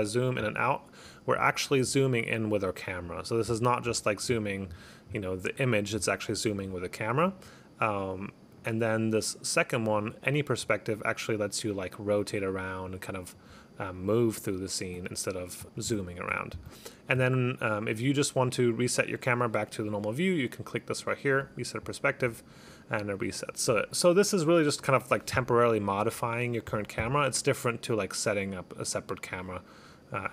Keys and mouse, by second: 0.8 click, 5.6 click, 6.8 click, 8.6 click, 10.0 click, 10.7 click, 13.8 click, 14.2 right click, 15.7 click, 17.9 click, 21.5 click, 26.2 click, 26.8 click, 29.3 click.